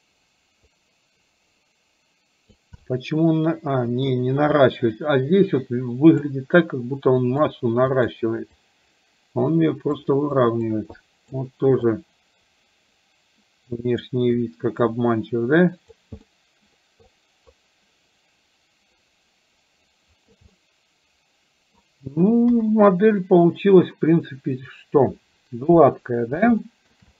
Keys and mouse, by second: 2.8-4.0 middle drag, 4.7-6.3 drag, 7.3 click, 8.0 click, 8.5-10.0 drag, 10.4 click, 10.9 click, 11.9-14.0 drag, 14.4-16.0 drag, 16.3 middle click, 17.2-20.4 drag, 20.5-21.9 middle drag, 22.5 KP_1, 26.7 shift+middle click.